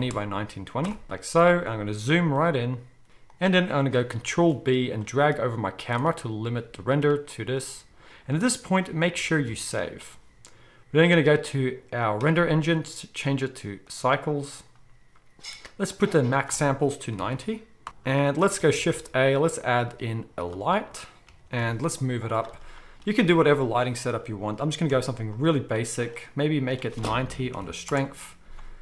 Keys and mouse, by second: 2.1 g, 3.1-11.1 middle drag, 3.1 g, 4.3 ctrl+b, 9.3 ctrl+s, 9.5 ctrl+s, 11.1 click, 11.2-12.6 middle drag, 12.6-18.3 drag, 17.9 g, 18.3-26.0 shift+middle drag, 18.7 shift+a, 21.2 g, 24.6 g, 26.0 click, 26.1 middle click, 26.8-28.8 drag.